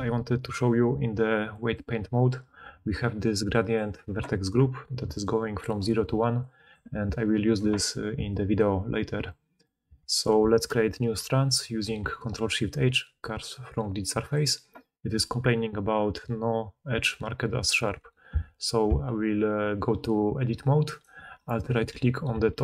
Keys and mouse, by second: 3.8-5.9 middle drag, 4.9-8.5 typing, 5.1-7.1 drag, 7.4-8.5 drag, 7.4-8.5 middle drag, 7.4-8.5 right drag, 11.4 ctrl+shift+h, 18.1 Tab, 20.9 alt+right click, 21.4 click, 22.2-22.6 right drag, 22.2 g.